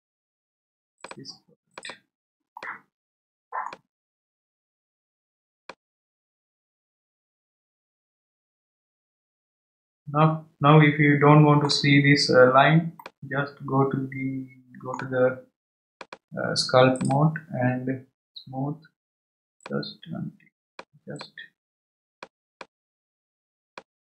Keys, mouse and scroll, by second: 1.7 click, 2.6-4.0 middle drag, 4.0 scroll up 1, 4.5-4.8 scroll up 3, 5.1-5.6 scroll down 1, 5.6-8.8 middle drag, 13.0-15.9 middle drag, 15.9-19.0 drag, 19.6-22.5 drag, 22.5-24.0 middle drag.